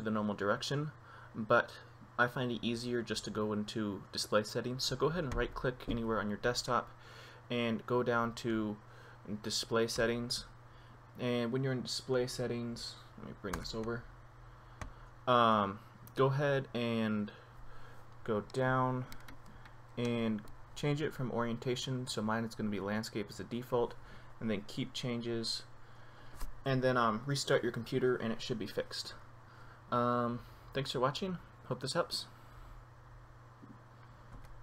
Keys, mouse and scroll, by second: 0.0 right click, 5.6 right click, 10.2 click, 15.1 click.